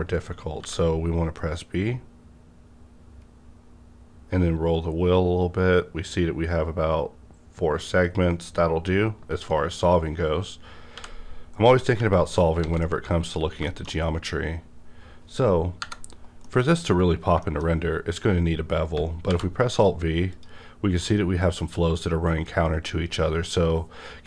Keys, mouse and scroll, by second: 0.6 double click, 0.6 b, 3.3 scroll up 1, 3.4 b, 6.1 scroll down 1, 8.0 click, 10.9 click, 10.9-12.0 scroll down 1, 12.0 x, 12.6 alt+a, 13.2 click, 13.6 middle click, 13.9 scroll up 1, 14.7-15.8 scroll down 1, 15.8 KP_Divide, 16.4 middle click, 16.8 scroll up 1, 17.4 shift+middle click, 17.6 shift+scroll up 2, 19.3 alt+v, 20.3 click.